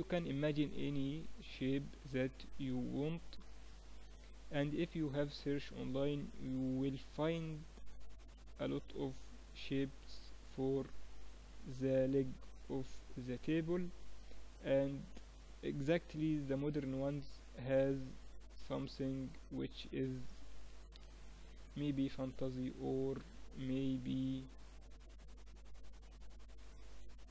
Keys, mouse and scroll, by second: 2.8 click, 4.6 right click, 5.4-6.6 middle drag, 6.6 click, 8.2 right click, 8.8-10.0 middle drag, 10.0 click, 11.2-13.0 right drag, 13.0-14.8 middle drag, 16.8 click, 17.8-19.7 middle drag, 19.7 click, 21.5 right click, 22.2-24.0 middle drag, 24.0 right click, 24.3-25.4 middle drag, 25.4-27.3 drag.